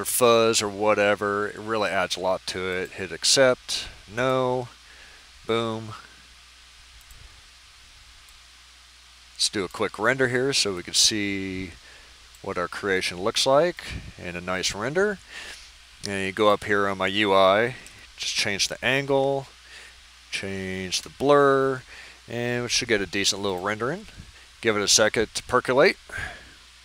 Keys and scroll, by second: 17.8 typing, 19.3 Tab, 19.8 6, 20.9 Return.